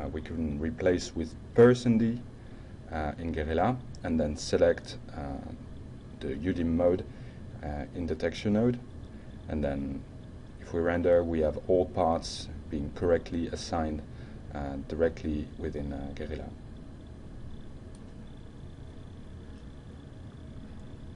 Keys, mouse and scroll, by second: 2.7 ctrl+d, 3.7 ctrl+Return, 6.3 ctrl+click, 7.0 ctrl+click, 8.2 ctrl+click, 9.0 ctrl+click, 9.7-10.4 ctrl+shift+middle drag, 15.5-16.0 ctrl+alt+middle drag, 17.0 ctrl+shift+middle click.